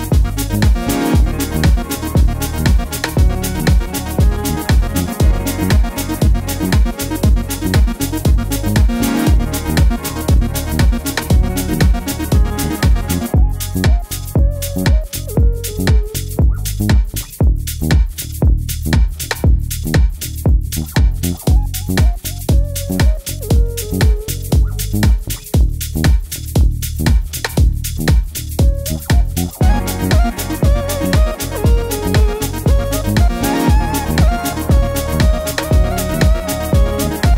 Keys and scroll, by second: 3.5 Right, 3.6 Right, 3.6 typing, 4.9 Left, 5.0 Left, 5.0 Left, 5.1 Left, 5.2 Left, 5.8 Right, 6.0 Down, 6.1 Down, 6.2 Down, 24.2 Escape.